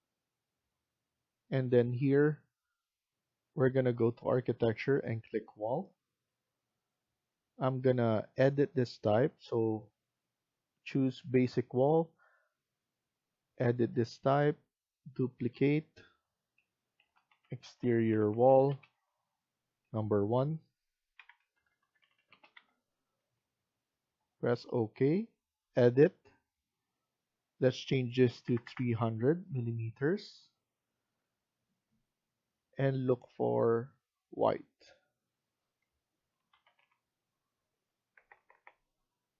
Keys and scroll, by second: 16.7-18.9 typing, 20.0-22.5 typing, 27.9-28.8 typing, 36.0-39.3 typing.